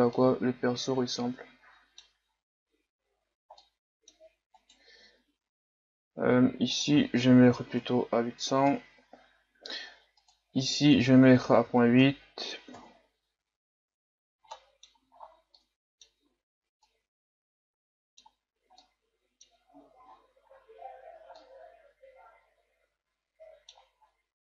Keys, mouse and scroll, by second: 0.2-2.3 middle drag, 2.3-3.6 scroll down 5, 3.6-4.6 middle drag, 4.6-8.7 right drag, 8.7-13.9 drag, 13.9-14.5 scroll up 7, 14.5 middle click, 15.1-15.5 scroll up 4, 15.5-18.5 middle drag, 18.5 scroll down 1, 18.8-20.1 middle drag, 20.1-21.5 scroll up 11, 20.7-24.0 middle drag, 24.0-24.4 scroll down 4.